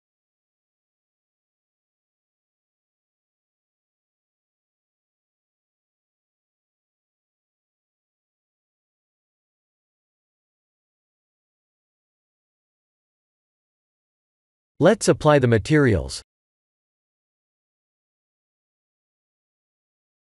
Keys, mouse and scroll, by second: 0.5 click, 1.0 middle click, 1.6 middle click, 2.0 middle click, 2.6 middle click, 3.6 KP_3, 4.0 KP_1, 4.7 shift+z, 6.1 click, 6.6 click, 7.2 click, 11.1 click, 11.3 scroll down 3, 11.9 shift+middle click, 11.9 scroll down 1, 12.8 click, 14.6 click, 16.0 g, 17.3 ctrl+s, 18.5 click.